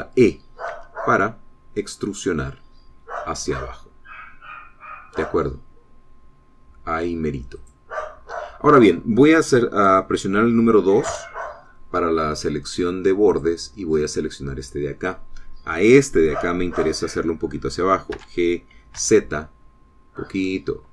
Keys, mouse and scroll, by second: 1.7 e, 8.7 click, 12.1 2, 14.4 click, 19.2 g, 20.0 z.